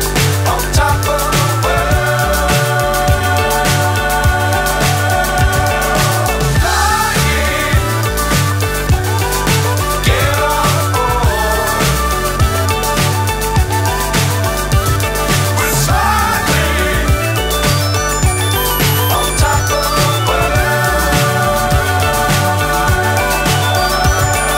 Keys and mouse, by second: 0.5-3.2 drag, 3.4-7.9 drag, 10.4-12.9 drag, 13.9-14.9 drag, 15.4-16.4 drag, 16.7-17.7 drag, 18.2-19.2 drag, 19.5-20.5 drag, 22.2 click, 23.4-24.5 drag.